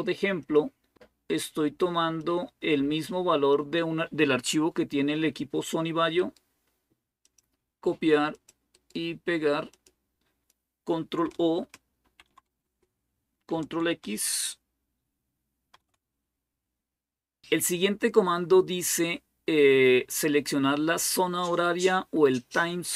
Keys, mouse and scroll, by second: 0.2 right click, 0.8-4.0 drag, 0.8-2.0 scroll down 1, 2.0-3.4 right drag, 6.0 right click, 7.1 click, 8.1 click, 9.5 click, 10.4 click, 11.8 ctrl+o, 12.5 Return, 15.5 ctrl+x.